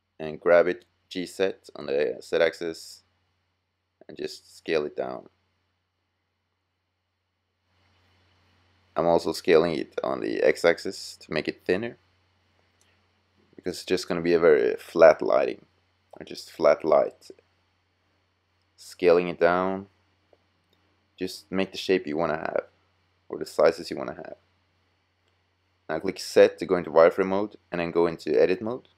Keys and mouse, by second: 0.6 middle click, 1.3 click, 1.4 s, 3.7 s, 6.2-7.2 middle drag, 7.4-8.4 middle drag, 9.1 s, 12.2 g, 15.0-16.0 middle drag, 16.8 s, 19.1-22.4 middle drag, 24.8 z.